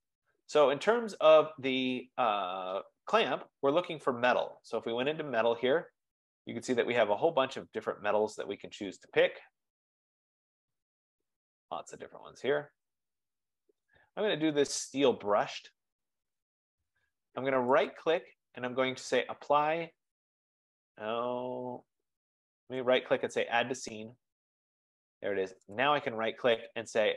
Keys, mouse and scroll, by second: 5.1-10.3 drag, 14.1 click, 14.9 click, 18.0 right click, 20.9 right click, 21.3 F15, 22.9 right click, 24.1 click, 25.8 right click.